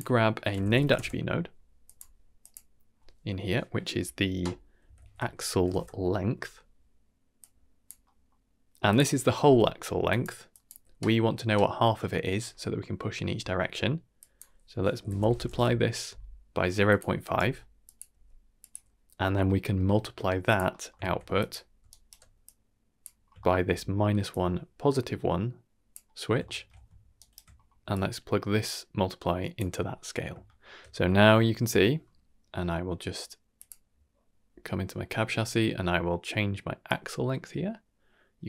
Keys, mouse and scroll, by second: 2.4-5.7 drag, 7.3 click, 8.0 middle click, 8.5-8.8 scroll up 1, 8.8 click, 9.8-10.7 typing, 10.0 click, 10.5 click, 14.2-16.9 drag, 18.1 g, 19.1 scroll down 1, 19.4 shift+middle click, 20.4 click, 20.7 middle click, 21.0 shift+d, 21.8 alt+right click, 22.4-23.1 drag, 23.2 scroll down 2, 23.4 shift+middle click, 24.2-25.5 drag, 26.4 shift+middle click, 27.1 ctrl+right click, 27.5 scroll down 2, 27.8 g, 27.9-29.5 drag, 30.4 shift+middle click, 31.4 shift+middle click, 33.5 click, 36.8-38.4 drag.